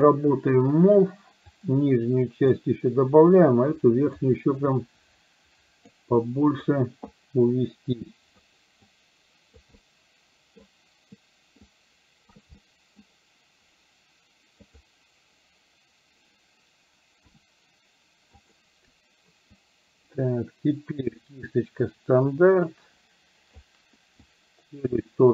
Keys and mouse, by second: 0.1 click, 1.6-2.6 drag, 3.6 click, 4.6-6.1 drag, 6.2 middle click, 7.2-8.6 drag, 9.0 click, 9.8 middle click, 11.8 shift+click, 12.6 middle click, 14.7 click, 17.2 f, 19.6-23.7 ctrl+drag, 24.3 ctrl+click.